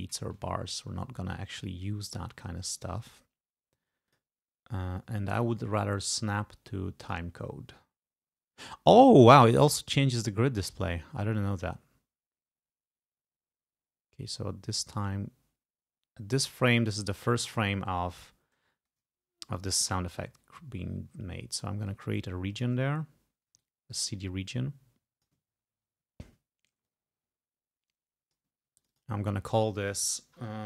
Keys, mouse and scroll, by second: 0.6 ctrl+scroll up 2, 4.1 click, 7.1 click, 11.4-17.4 drag, 21.9 ctrl+click, 23.2 ctrl+scroll up 2, 23.7-25.6 ctrl+drag, 25.6 ctrl+scroll up 2, 26.1 ctrl+scroll down 2, 26.9-28.6 drag, 28.8 ctrl+click.